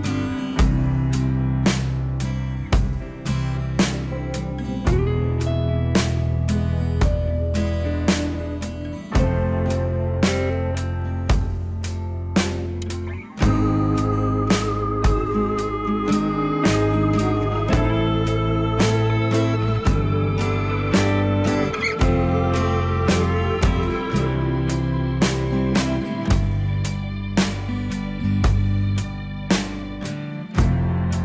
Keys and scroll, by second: 0.0 alt+x, 16.0 ctrl+z.